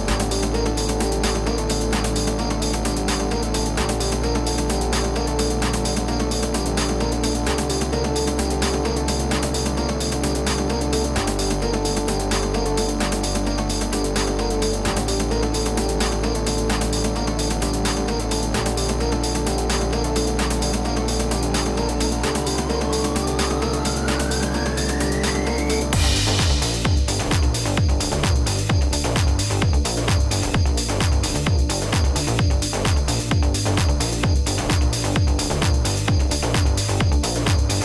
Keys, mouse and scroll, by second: 1.2-13.3 drag, 13.3-23.5 drag, 24.5-37.7 drag.